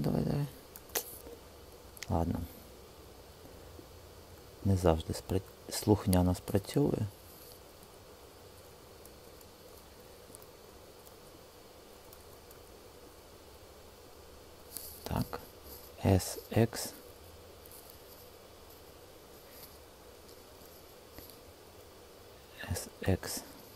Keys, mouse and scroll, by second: 5.4 alt+shift+click, 8.7 super+z, 9.1 super+z, 15.5 s, 16.4 x, 19.3 Escape, 22.4 s, 23.1 x.